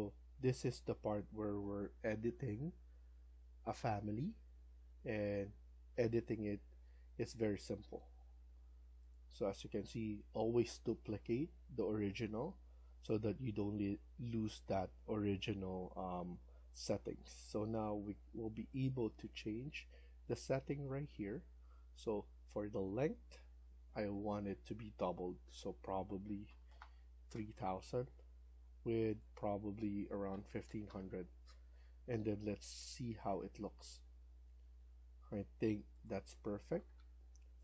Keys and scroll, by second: 25.9-26.9 typing, 29.9-31.0 typing, 34.6 Escape, 34.9 Escape.